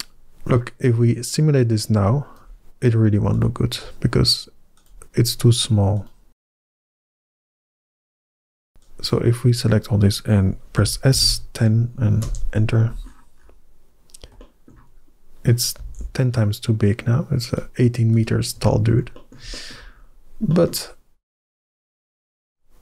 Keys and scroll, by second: 10.6 s, 11.0 1, 11.1 0, 12.1 Return, 15.6 g, 15.8 z.